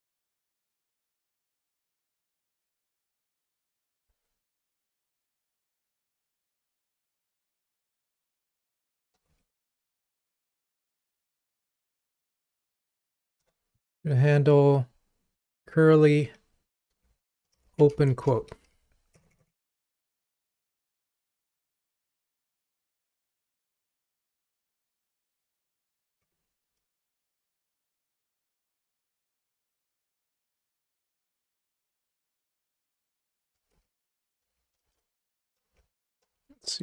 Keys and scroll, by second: 2.5 alt+Up, 11.2 alt+Up, 12.6 super+d.